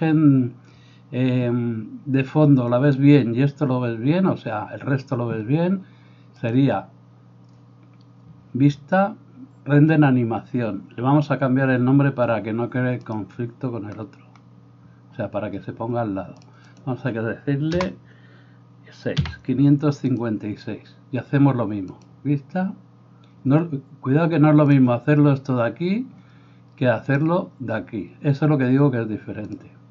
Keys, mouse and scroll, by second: 13.1 click, 16.5-20.3 drag, 27.1-29.9 drag.